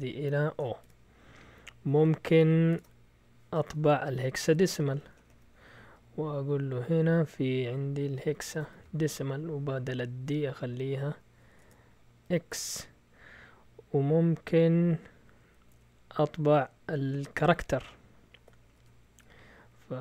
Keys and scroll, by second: 0.4-5.6 typing, 6.8 typing, 7.9-12.2 typing, 9.3 Right, 11.6 Delete, 15.7 Escape, 18.6-20.0 typing.